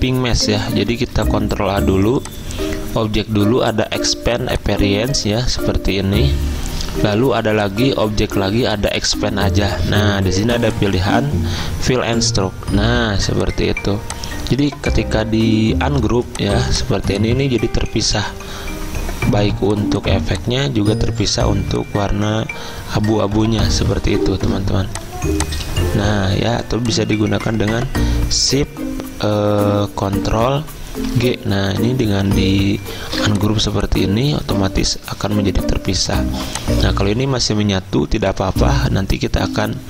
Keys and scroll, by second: 1.1 ctrl+a, 18.0 ctrl+z, 21.4 ctrl+z, 26.3 ctrl+shift+z, 30.8 ctrl+z, 34.5 ctrl+shift+z, 35.6 Escape, 37.5 ctrl+z.